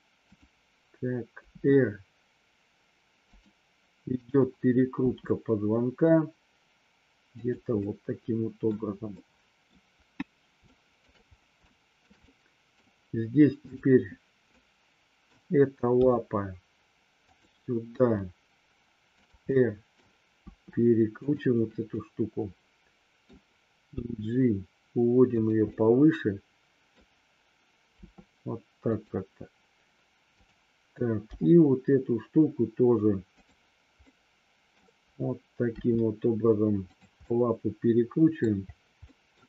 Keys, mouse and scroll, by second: 1.4 r, 3.3 click, 4.1 click, 5.0 r, 7.4 drag, 7.8-8.6 middle drag, 9.0-9.6 middle drag, 10.5-11.0 shift+middle drag, 11.5-12.0 shift+middle drag, 12.3-12.8 middle drag, 13.6-14.0 drag, 14.5-15.3 middle drag, 15.9 g, 17.1 click, 17.9 r, 19.1 click, 19.4 middle click, 20.4 r, 21.1 click, 21.9-23.3 middle drag, 23.9 g, 25.3 click, 25.6-26.9 middle drag, 28.0 r, 28.8 click, 30.4 click, 31.3 g, 34.0-34.8 middle drag, 35.8 r, 36.8 click, 37.3-38.4 middle drag, 39.0 middle click.